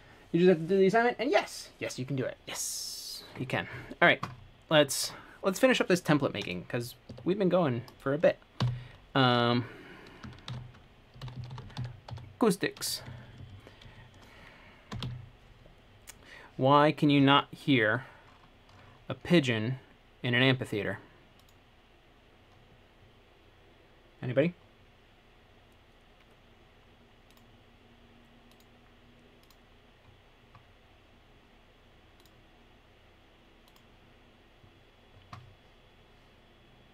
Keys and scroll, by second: 7.3 ↺, 8.8 typing, 10.4-12.8 typing, 13.1 Left, 13.3 Left, 13.4 Left, 15.1 BackSpace, 15.2 c.